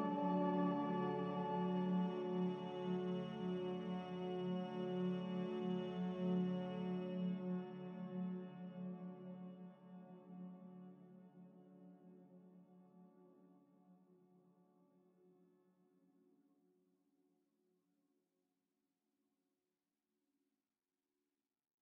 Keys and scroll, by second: 16.7 Delete, 19.7 ctrl+c, 19.8 ctrl+v, 21.5-21.8 typing.